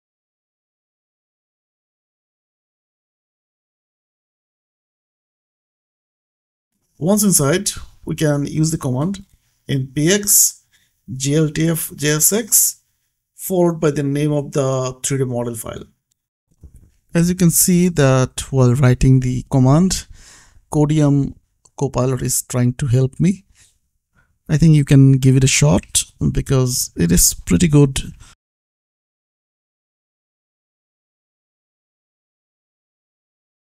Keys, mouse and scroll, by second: 0.2 KP_3, 0.3 d, 1.9 Tab, 5.8 Return, 9.8 click, 10.6 scroll down 1, 12.5 click, 15.0-17.3 typing, 26.0 space, 27.0 click, 29.4 click, 31.8 click.